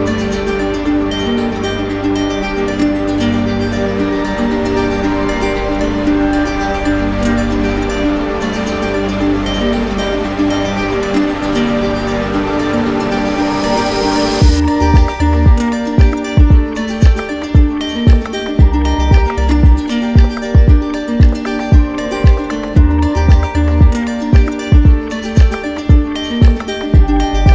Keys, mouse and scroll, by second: 0.2 click, 0.8 click, 1.6 click, 2.3 shift+click, 2.4 shift+click, 2.8 click, 3.4 shift+click, 4.0 click, 4.4 shift+click, 4.6 shift+click, 5.4 click, 6.3 shift+click, 6.7 click, 8.0 right click, 12.0 right click, 13.2 alt+right click, 14.0 z, 14.9 click, 15.8 alt+click, 17.3 right click, 18.1 click, 18.7 click, 19.9 click, 20.1 shift+click, 20.7 shift+click, 21.8 shift+click, 22.7 shift+click, 23.5 shift+click, 23.9 shift+click, 24.5 shift+click, 25.6 shift+click, 26.1 shift+click, 26.8 shift+click, 27.3 shift+click.